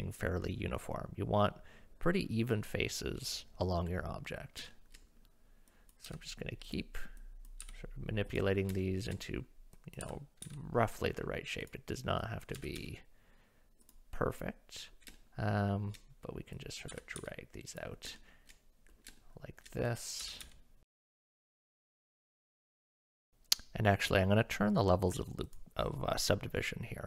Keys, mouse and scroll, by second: 4.7 shift+middle click, 5.7 click, 6.1 g, 7.2 click, 7.6 g, 8.8 shift+middle click, 9.8 click, 10.0 g, 12.3 click, 12.6 g, 14.2 click, 15.2 shift+click, 16.6 click, 16.9 g, 18.2 shift+click, 19.2 shift+middle click, 19.9 click, 20.2-22.1 typing, 20.9 click, 21.0 click, 21.3 click, 21.5 click, 21.8 click, 22.3 click.